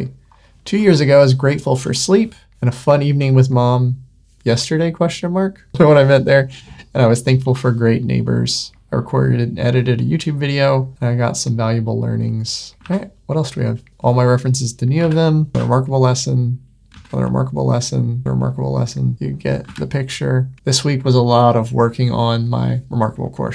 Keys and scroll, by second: 12.8 super+w, 15.0 super+w, 16.8 super+w, 18.2 super+w, 19.1 super+w.